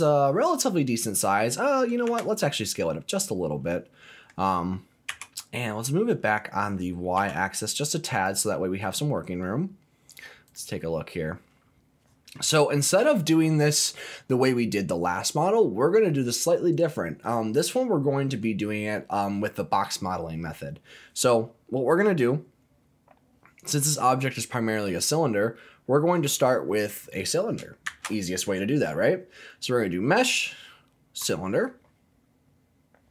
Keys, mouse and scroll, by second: 2.0 s, 3.1 click, 3.4 scroll down 1, 3.7 middle click, 5.1 g, 7.1 y, 8.1 click, 8.6-9.2 scroll up 4, 9.2 middle click, 10.5 click, 11.0-11.8 scroll down 1, 11.8-12.3 scroll down 1, 12.5-13.5 scroll up 1, 27.8 shift+a, 32.5-33.1 scroll down 2.